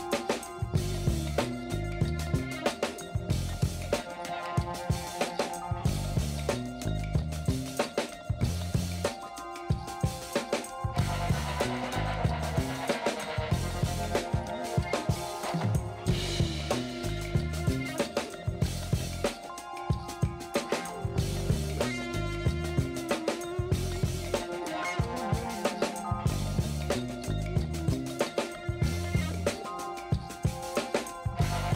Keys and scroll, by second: 0.7 space, 3.9 space, 4.4 v, 4.5 space, 5.5 b, 10.9 alt+shift+n, 11.1 ctrl+space, 11.6 ctrl+space, 13.4 v, 13.7 ctrl+alt+z, 14.6 b, 16.2 F9, 18.7 space, 20.1 space, 20.3 ctrl+alt+z, 21.7 space, 24.8 space, 27.1 shift+space, 31.0 shift+space, 31.6 [.